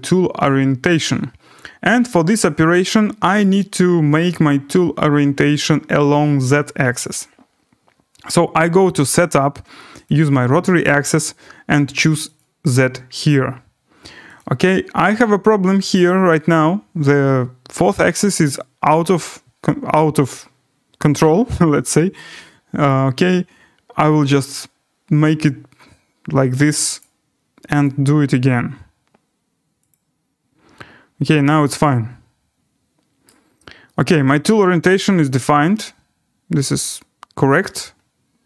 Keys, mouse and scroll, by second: 3.4 right click, 3.8 middle click, 4.5 scroll down 4, 7.3-8.4 scroll, 8.5 scroll down 4, 10.1 click, 10.7 click, 12.4 click, 14.4 click, 15.9 right click, 19.2 click, 21.7-22.7 scroll, 22.9 click, 23.2 scroll, 24.0 scroll, 25.2 scroll, 27.0 click, 27.8 click, 29.9 click, 31.5 click, 33.2 right click, 33.4 scroll, 36.3 scroll, 37.6 right click, 37.9 scroll.